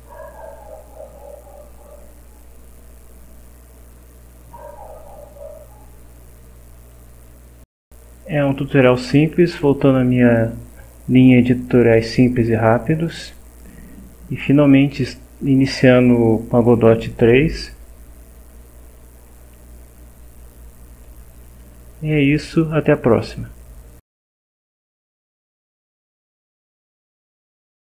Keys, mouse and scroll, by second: 6.2-7.1 drag, 19.0-21.2 drag, 21.4 click, 25.0 click, 25.7 click, 26.2 click.